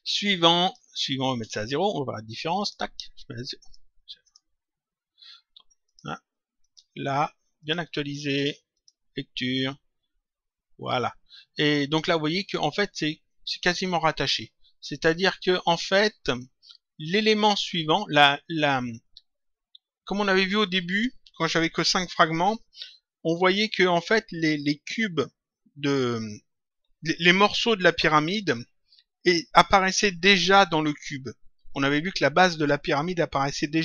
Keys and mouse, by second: 0.4 click, 1.5 click, 5.7 click, 8.7 click.